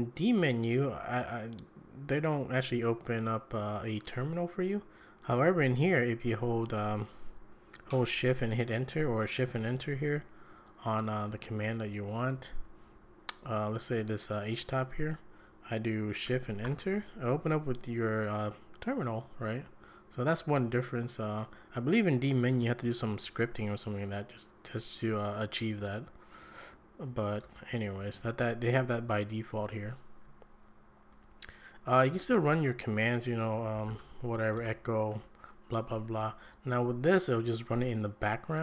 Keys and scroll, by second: 11.2 Down, 11.3 Down, 11.7 Up, 11.8 Up, 12.3 Down, 12.5 Down, 12.9 Up, 13.4 Up, 16.6 shift+Return, 27.4 ctrl+space, 28.2 shift+Right, 30.2 shift+Right, 31.8 Down, 32.2 Up, 33.3-34.5 typing, 35.9 Down, 36.2 Up.